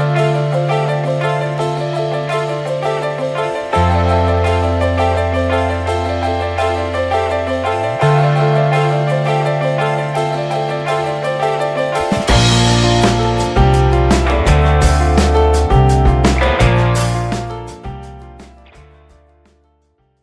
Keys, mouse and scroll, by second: 1.8 Tab, 1.9 drag, 2.2 shift+middle drag, 2.3 scroll up 1, 2.5-3.0 middle drag, 3.0 scroll up 1, 3.2-3.7 middle drag, 3.7-4.4 scroll up 3, 3.8 middle click, 4.4-4.8 middle drag, 4.8 scroll up 2, 5.0-5.7 shift+middle drag, 5.7 ctrl+s, 5.8 click, 6.9 click, 7.3 scroll down 3, 7.7-8.2 shift+middle drag, 8.2 ctrl+s, 9.0 click, 9.9 shift+middle drag, 10.1-11.3 scroll up 5, 10.4 drag, 10.8 shift+middle click, 11.3-12.3 shift+middle drag, 12.3 ctrl+s, 12.5-13.1 shift+middle drag, 13.1 ctrl+s, 14.7-16.9 drag, 17.2-17.8 shift+middle drag, 17.8 ctrl+s.